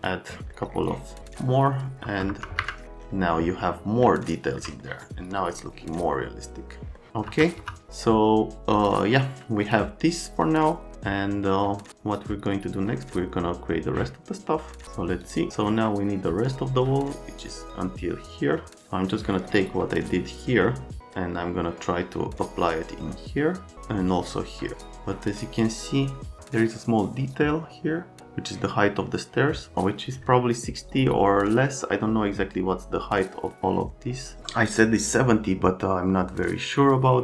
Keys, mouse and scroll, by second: 0.5 middle click, 2.0 F3, 2.3 F3, 2.6 F4, 4.0 alt+middle click, 4.8 middle click, 5.5 middle click, 7.0 right click, 7.3 F3, 7.6 F3, 8.7 click, 9.6 click, 15.2 click, 24.7 click.